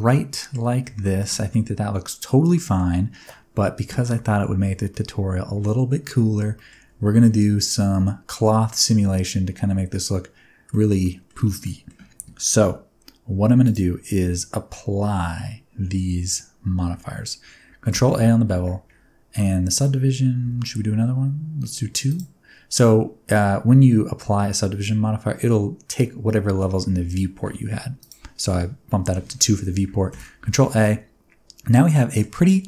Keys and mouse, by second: 1.0 shift+middle click, 1.5-2.7 middle drag, 4.9 middle click, 6.5 shift+middle click, 7.2-10.7 middle drag, 11.0 middle drag, 11.6 middle drag, 13.6 click, 17.9 ctrl+a, 19.7 z, 20.4 z, 22.1 middle click, 28.0 click, 30.1 ctrl+a, 30.5 Tab, 30.8-32.2 middle drag.